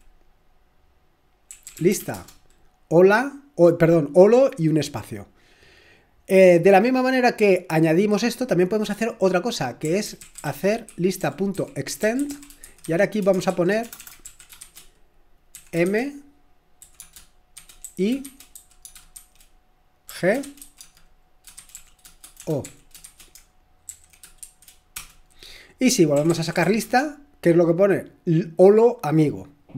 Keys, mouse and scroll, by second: 1.2-2.5 typing, 4.5 typing, 9.7-27.1 typing.